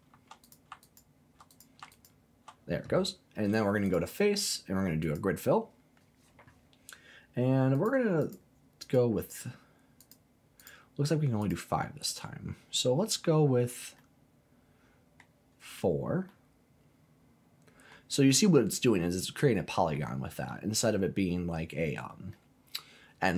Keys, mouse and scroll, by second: 0.4 alt+click, 0.8 alt+click, 1.5 alt+click, 1.9 alt+click, 3.8-5.1 drag, 7.7 click, 8.2 click, 8.8 click, 10.0 click, 10.5 click, 11.4 click, 12.9-14.0 scroll down 3, 14.0-15.3 middle drag, 15.5-16.3 scroll up 3, 16.3-17.9 middle drag, 20.2 scroll down 1, 21.3-22.3 scroll up 2, 22.3-23.3 middle drag.